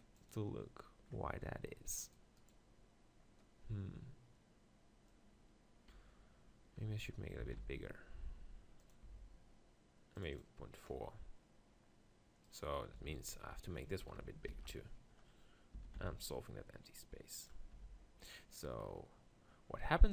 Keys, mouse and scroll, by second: 0.8 click, 1.3-2.0 scroll up 1, 2.0-5.1 right drag, 6.8 Tab, 7.4 s, 8.9-11.1 drag, 9.1 Tab, 12.6 right click, 13.0 Tab, 14.5 ctrl+l, 15.7 s, 17.5-18.7 right drag, 17.9 Tab.